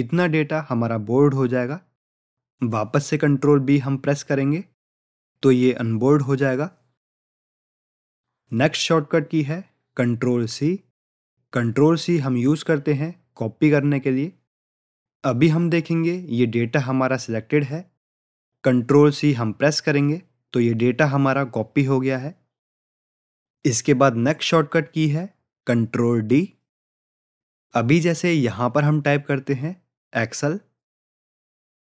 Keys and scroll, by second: 6.3 ctrl+b, 19.3 ctrl+c.